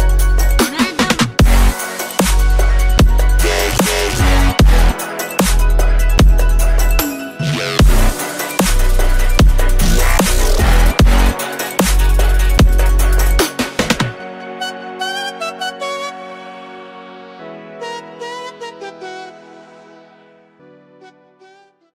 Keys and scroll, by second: 6.3 alt+shift+/, 8.6 shift+Home, 9.3 shift+space, 21.3 shift+space.